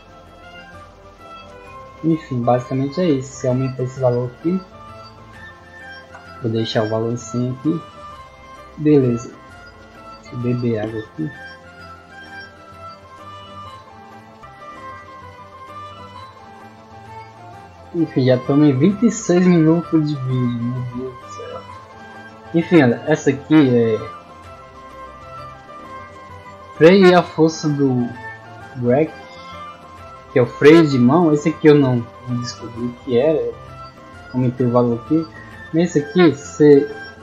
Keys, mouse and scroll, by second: 7.3 middle click, 12.5 click, 14.3 click, 17.0 click, 26.7-28.3 middle drag, 29.2 middle click, 31.7 click, 34.8 click.